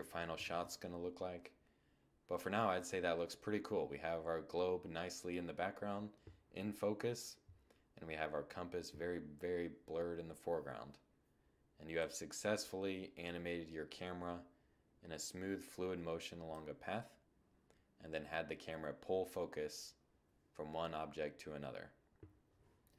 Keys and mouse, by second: 10.5-12.2 drag, 12.2-12.6 middle drag.